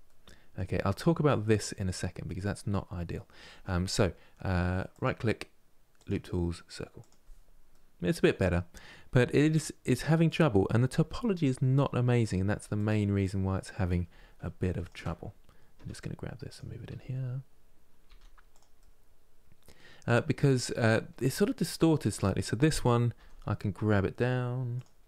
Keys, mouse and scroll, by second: 4.6-7.4 right drag, 7.4-9.0 middle drag, 9.0 r, 14.5 shift+click, 15.5 g, 17.8 r, 18.5-21.8 middle drag, 21.8-22.9 drag, 22.9 g, 24.7-25.0 middle drag.